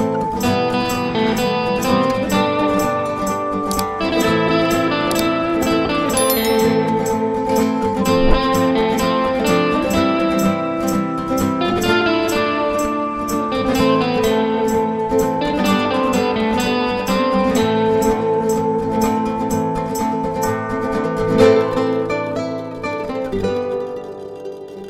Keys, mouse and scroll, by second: 5.1 click, 8.9 click, 11.7 click, 12.1 double click, 13.2 click, 14.3 click, 15.2 double click, 16.4 click, 18.0 click, 24.6 click.